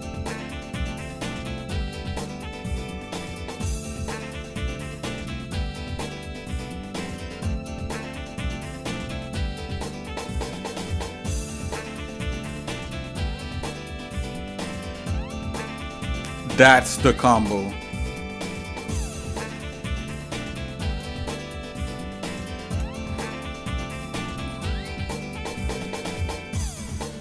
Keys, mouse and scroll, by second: 0.5 Tab, 1.4 shift+middle click, 2.7-3.3 scroll down 2, 3.5 middle click, 4.1-5.3 shift+middle drag, 5.8 ctrl+s, 8.6 click, 17.6 shift+middle click, 18.8 shift+middle click, 19.5 shift+middle click, 20.4 shift+middle click, 21.7 middle click, 22.4 shift+middle click, 26.5 middle click.